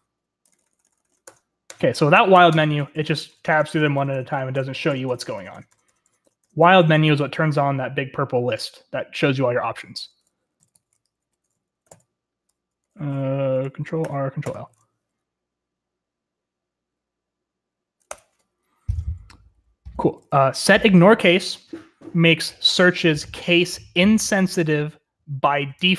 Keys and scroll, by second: 0.0-1.2 typing, 3.7 Tab, 3.9 Tab, 4.2 Tab, 4.5 Tab, 4.8 Tab, 5.0 Tab, 5.5 Tab, 5.6 Tab, 6.0 Tab, 6.2 Tab, 6.5 Escape, 6.5 Tab, 6.5 Return, 6.5 typing, 6.7 Tab, 9.9 Escape, 10.3-11.6 typing, 11.8 ctrl+x, 11.8 ctrl+l, 13.1 BackSpace, 14.0 ctrl+r, 14.4 ctrl+l, 18.0 Return, 19.9 typing.